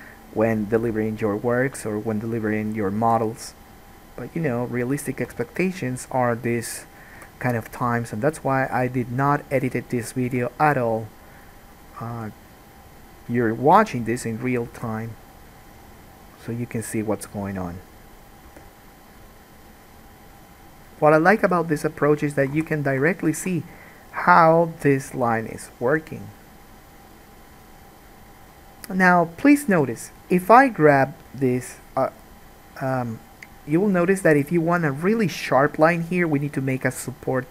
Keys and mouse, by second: 1.6-3.2 middle drag, 1.6-3.2 right drag, 3.2 g, 5.6 alt+a, 7.4 g, 10.5 g, 12.0 middle click, 12.0 right click, 12.3 g, 15.0 alt+a, 18.6 g, 21.2 middle click, 21.2 right click, 21.6 g, 22.7 alt+a, 31.1 2.